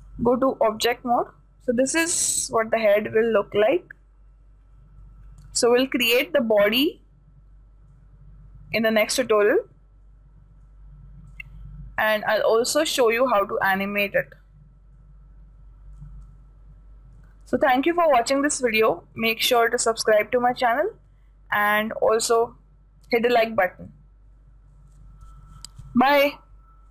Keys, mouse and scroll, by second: 0.1-3.6 drag, 1.6-2.1 scroll down 1, 2.1-8.2 middle drag, 8.5-9.2 scroll up 1, 9.2-12.1 middle drag, 12.1-12.9 scroll up 1, 12.9-14.4 middle drag, 14.4-14.8 scroll up 1, 14.8-17.3 middle drag, 21.3-26.9 middle drag.